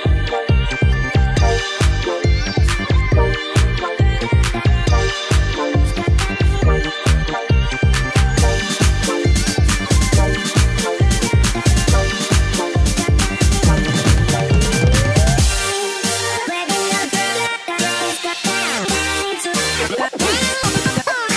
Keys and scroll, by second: 0.4 typing, 0.5 Left, 1.6-2.1 Down, 2.4 Right, 8.6 i, 11.5 ctrl+-.